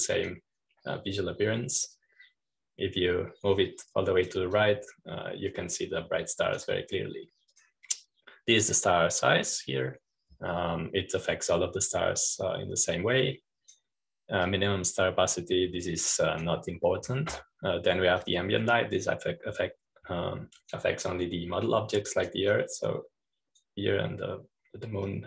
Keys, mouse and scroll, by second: 0.6-2.9 drag, 3.9-9.4 drag, 9.4-19.2 drag, 20.1-25.2 drag.